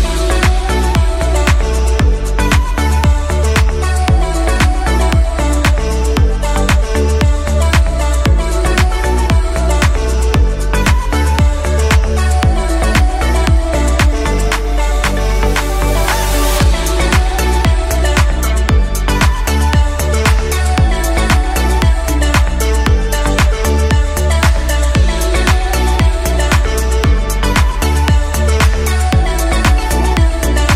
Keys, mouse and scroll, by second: 1.2 g, 5.2 right click, 6.1 click, 6.7-8.0 middle drag, 8.0 click, 10.8-12.0 drag, 13.9 click, 14.3-16.6 middle drag, 16.6 click, 17.5 KP_1, 18.1 KP_3, 19.2 shift+d, 20.6 s, 21.9-23.4 middle drag, 23.4 s, 28.0 KP_3, 29.3 g, 30.4-30.7 scroll up 1.